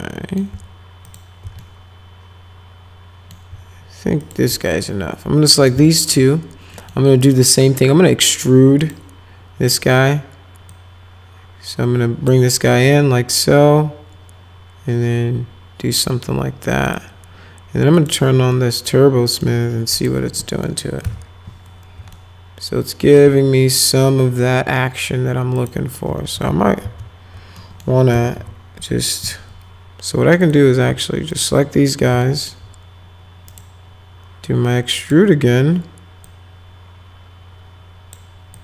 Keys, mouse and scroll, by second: 1.1 ctrl+click, 1.6-3.3 alt+middle drag, 4.2 click, 5.6 ctrl+click, 5.8 alt+middle click, 6.7 middle click, 7.2 right click, 8.8 click, 10.7-12.3 drag, 12.9-15.9 drag, 16.9 click, 17.9 click, 18.5 alt+middle click, 19.9 click, 20.4 middle click, 21.0 F4, 22.1 alt+middle click, 22.6 alt+right click, 25.6 click, 26.2 ctrl+z, 26.5 ctrl+z, 26.8 ctrl+z, 27.6 middle click, 28.1 F5, 28.3 F4, 30.4 click, 31.3 ctrl+click, 32.2 alt+middle click, 33.5 right click, 35.0 click, 36.2-38.1 drag, 38.5-38.6 drag.